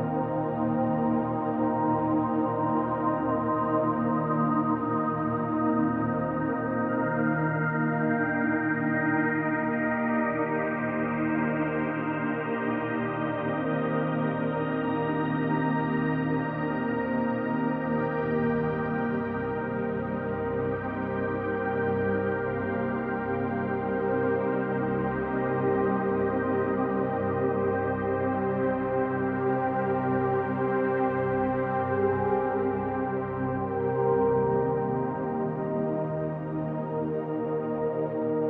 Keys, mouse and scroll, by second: 0.3 click, 0.8-3.5 middle drag, 3.5-6.9 drag, 6.9 f, 7.1-8.3 drag, 8.3 f, 9.7 click, 9.9-10.2 scroll up 1, 10.4 click, 11.9 middle click, 12.5 click, 12.7 middle click, 13.3 click, 14.1-20.8 middle drag, 14.4-14.9 scroll down 2, 15.3 scroll up 2, 16.6 scroll up 2, 17.3 scroll down 2, 18.0 z, 20.8 click, 22.5 click, 22.6-23.9 middle drag, 23.9 click, 24.0-25.2 middle drag, 24.9 scroll up 2, 25.2 click, 25.5 middle click, 26.0-27.6 shift+drag, 27.6-28.7 middle drag, 28.7 shift+click, 29.3 scroll up 1, 29.9 shift+click, 30.2 middle click, 30.6 shift+click, 30.9 middle click, 31.4 shift+click, 31.6-33.3 middle drag, 32.4 scroll up 1, 33.3 shift+click, 34.3 ctrl+z, 34.7-38.3 shift+middle drag, 35.1 scroll down 1, 36.5 z, 37.3-37.9 scroll up 1, 38.3-38.4 shift+drag.